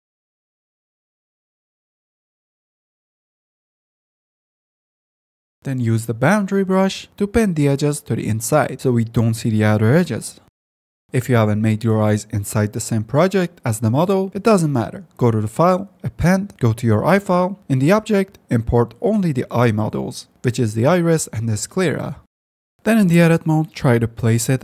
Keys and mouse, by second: 0.1 f, 1.3 ctrl+click, 2.1 click, 8.8 click, 9.2 g, 9.2 f, 9.7 F10, 11.1 F9, 11.2 f, 12.9 click, 15.3-16.6 drag, 21.8 g, 22.2 ctrl+z, 22.4 Tab, 22.5 a, 22.6 g, 23.3 g, 24.5 g.